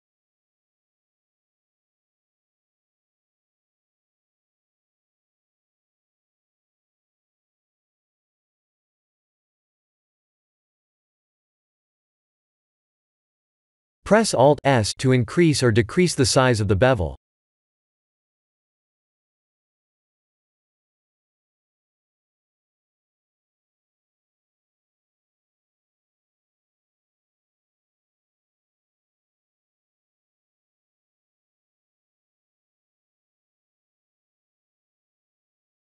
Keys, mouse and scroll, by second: 0.5 Tab, 0.9 middle click, 1.6 middle click, 1.7 shift+z, 2.1 middle click, 2.8 middle click, 2.9 middle click, 3.3 middle click, 3.9 middle click, 4.3 middle click, 4.6 middle click, 5.2 Tab, 6.0 click, 6.7 g, 8.5 Tab, 8.9 middle click, 10.9 middle click, 11.1 middle click, 12.0-12.6 scroll down 2, 12.4 middle click, 13.1 Tab, 14.3 click, 15.1 alt+s, 20.3 click, 21.1 alt+s, 22.6 KP_1, 24.0 alt+s, 26.4 click, 26.9 alt+s, 29.1 Tab, 30.1 scroll up 2, 30.3 Tab, 32.0 click, 32.5 shift+click, 33.0 r, 34.6 click, 35.2 shift+click, 35.6 r.